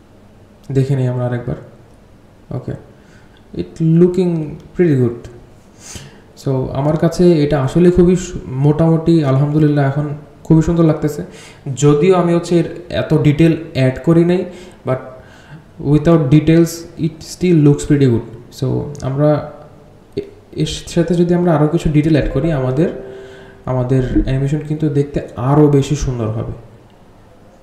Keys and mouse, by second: 6.3 space, 7.7-11.2 drag, 13.5 click, 14.4-17.5 drag, 18.2 r, 19.0-21.4 drag, 21.9 r, 23.1-24.0 drag, 26.0-27.6 alt+drag.